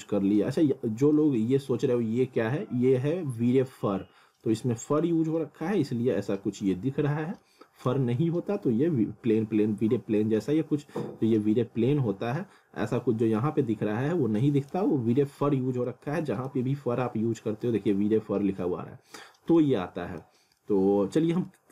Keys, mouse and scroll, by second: 1.2-1.8 scroll down 1, 4.1-4.4 scroll up 2, 4.4 middle click, 5.4 scroll down 1, 6.8 scroll up 1, 7.4 middle click, 13.7-14.1 scroll down 1, 14.9 scroll up 1, 15.9 alt+middle click, 19.2 scroll down 1, 19.6 alt+middle click, 20.4 scroll up 1, 20.6 alt+middle click, 21.2 scroll down 1, 21.5 alt+middle click.